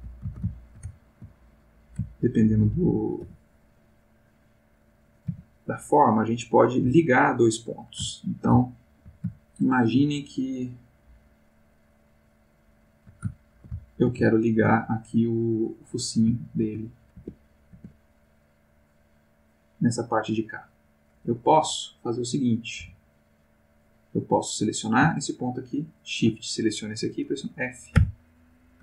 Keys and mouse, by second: 0.5 ctrl+shift+middle click, 1.7 click, 2.1 ctrl+middle click, 3.2 x, 3.5 click, 4.2 click, 5.2 g, 6.0 click, 6.7 click, 6.9 g, 7.4 click, 8.1-9.1 ctrl+middle drag, 9.3-11.0 ctrl+shift+middle drag, 11.1-13.3 shift+middle drag, 13.4-14.7 ctrl+shift+middle drag, 14.9 ctrl+shift+middle click, 15.8 click, 16.3 ctrl+middle click, 17.2 ctrl+Tab, 18.2 click, 18.8 click, 19.4 click, 20.4 click, 21.6 x, 22.0 click, 22.5 click, 22.8 x, 23.0 click, 23.9 click, 25.4 shift+click, 27.9 f.